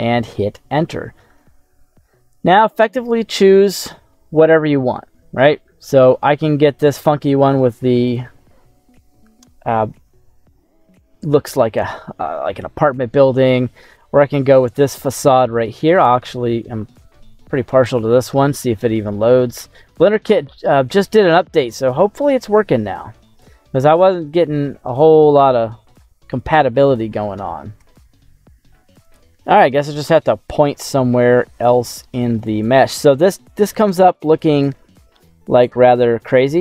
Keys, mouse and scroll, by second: 8.0 click, 15.0 click, 22.0-23.1 middle drag, 23.4-24.0 scroll down 2, 24.0-26.3 middle drag, 25.9 scroll up 1, 27.7 n, 31.0-31.4 scroll down 3, 31.4 middle click, 32.6 middle click, 33.4-34.0 scroll up 4, 34.0-35.0 middle drag, 35.3 scroll up 3, 35.6-36.6 scroll down 3.